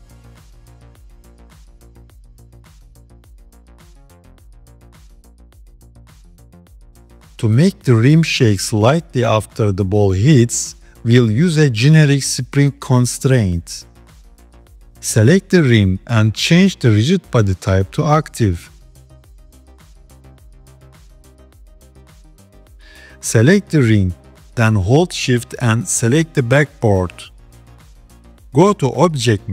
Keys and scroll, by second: 0.7 KP_3, 2.0 g.